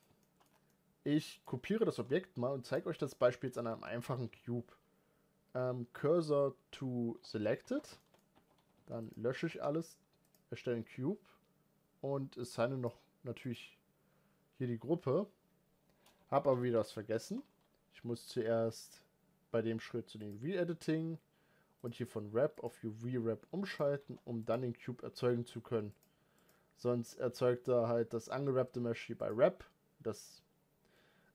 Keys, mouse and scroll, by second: 0.0 shift+middle drag, 0.2 scroll down 3, 0.5-1.1 middle drag, 1.1 click, 1.4 middle click, 1.7 shift+d, 2.8 shift+middle click, 3.0 scroll up 3, 3.5 Tab, 7.0 shift+s, 7.7-8.1 shift+middle drag, 8.1 Tab, 10.1 shift+a, 13.3-16.1 drag, 16.1 ctrl+z, 16.4 ctrl+z, 20.0-23.6 drag, 23.6 x, 24.3 shift+a, 26.3-31.3 drag.